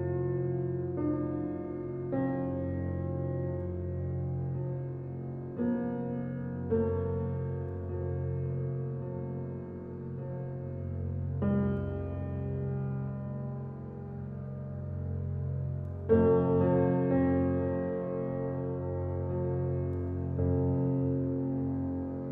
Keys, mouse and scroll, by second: 0.2 click, 0.4-1.7 middle drag, 1.7 click, 2.2 g, 4.3 Tab, 4.4 click, 5.3 shift+middle click, 5.5-6.1 scroll up 2, 6.1 e, 7.7-8.7 middle drag, 8.7 e, 12.0 Tab, 12.3-12.6 middle drag, 12.6 click, 12.8 scroll down 3, 13.0-14.6 middle drag, 14.8-16.2 middle drag, 16.2 drag, 16.5-16.8 shift+middle drag, 16.8-17.2 scroll up 2, 17.2-18.3 shift+middle drag, 18.3 Tab, 18.5 click, 20.3 ctrl+r.